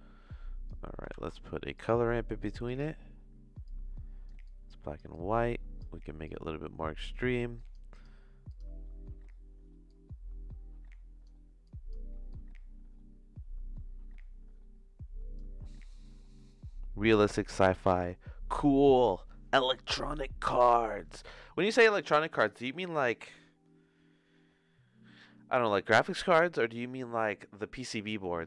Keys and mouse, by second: 1.1 shift+a, 3.6-5.0 drag, 5.1 click, 6.2 click, 7.6 click, 7.9 click, 9.8-11.3 drag, 11.6 click, 12.3-15.3 drag.